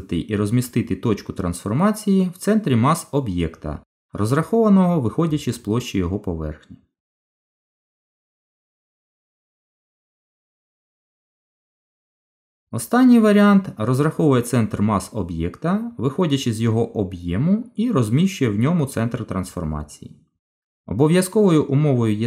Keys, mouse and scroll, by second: 1.7 right click, 6.4 middle click, 11.5 Tab, 13.8 click, 15.9 click, 17.1 shift+click, 17.7 shift+click, 18.4 shift+click, 19.1 f, 19.4 middle click, 20.5 click, 21.2 shift+click, 21.8 shift+click.